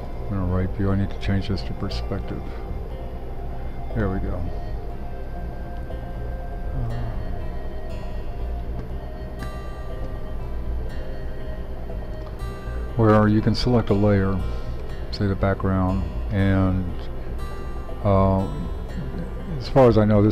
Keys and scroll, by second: 17.6 d, 19.6 d.